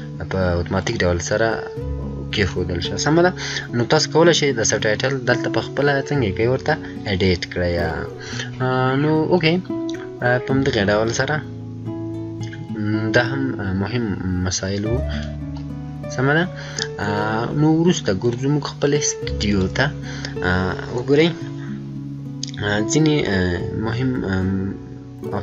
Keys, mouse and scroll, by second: 0.7 click, 0.7 click, 10.0 click, 10.0-10.4 scroll down 1, 15.3 click, 19.3 click, 19.4 click.